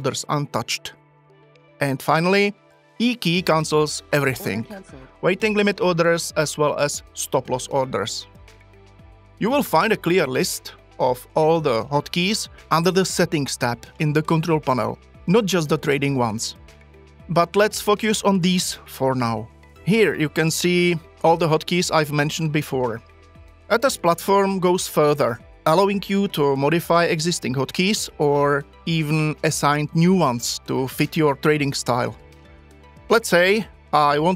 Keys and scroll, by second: 4.3 e.